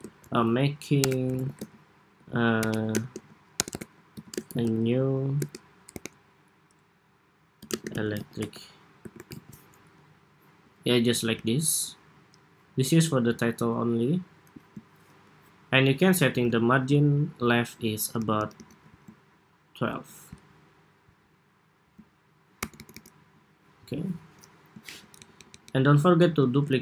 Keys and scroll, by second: 9.7 Escape, 16.0 alt+shift+Left, 17.9 alt+Right, 18.1 alt+Right, 18.3 alt+Right, 22.3 alt+Right, 22.5 alt+Right, 26.0 super+d.